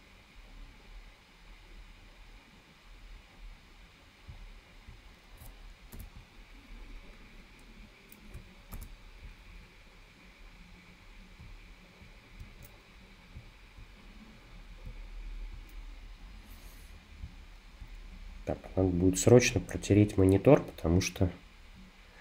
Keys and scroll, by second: 6.0 super+-, 8.8 super+=.